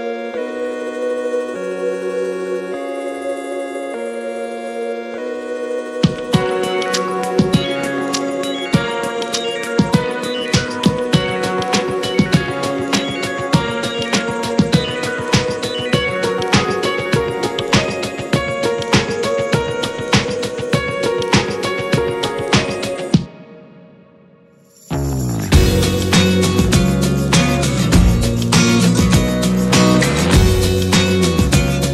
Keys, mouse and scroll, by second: 2.2-3.2 scroll down 15, 3.2-3.8 middle drag, 3.8-4.1 scroll up 2, 4.1-8.8 middle drag, 4.8-5.2 scroll up 5, 8.8-9.3 scroll down 10, 9.3-9.8 middle drag, 9.8 scroll up 1, 10.0 click, 10.3-11.7 middle drag, 11.7 click, 12.5 click, 13.2 click, 14.4-19.9 drag, 19.9 scroll up 2, 20.7-21.5 shift+middle drag, 21.5-22.5 scroll up 12, 22.5-23.1 middle drag, 23.1 `, 23.9 shift+middle drag, 24.1-24.4 scroll up 2, 24.4-27.4 middle drag, 27.4-27.7 scroll down 2, 27.7 s, 28.3-28.7 scroll down 8, 28.7 middle click, 29.1-29.4 scroll up 4, 29.5-29.9 middle drag, 30.0-30.3 scroll up 2, 30.3-31.9 middle drag.